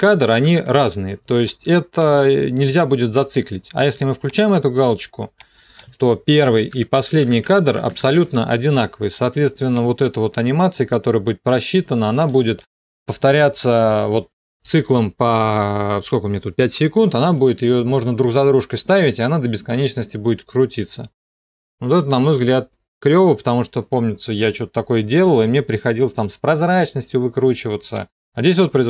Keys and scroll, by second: 0.1 Home, 0.3 End, 0.6 Home, 1.0 End, 6.7 End, 7.0 Home, 7.2 End, 7.5 Home, 7.7 End, 8.0 Home, 8.2 End, 8.4 Home.